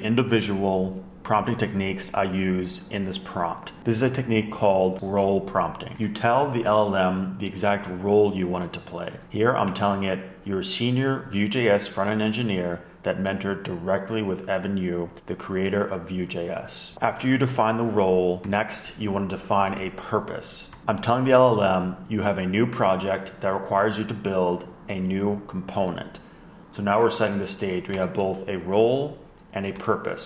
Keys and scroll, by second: 6.0 Left, 6.5 shift+super+Right, 7.2 super+=, 9.6 Left, 10.3 shift+super+Right, 18.4 Down, 18.5 Down, 19.0 shift+super+Left, 27.1 BackSpace, 28.0 Up, 28.1 Up, 28.5 shift+super+Right, 29.7 Down, 29.7 Left, 30.0 Down, 30.2 Down.